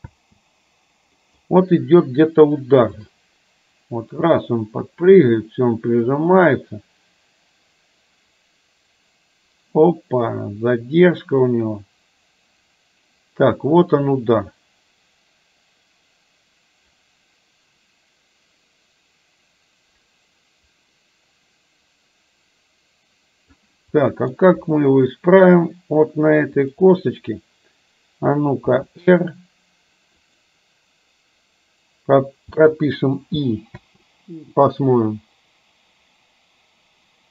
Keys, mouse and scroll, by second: 0.0 space, 1.3 middle click, 3.0-23.7 drag, 24.0-24.4 middle drag, 24.5 KP_3, 26.5 click, 28.8 r, 32.5 i, 33.8 space.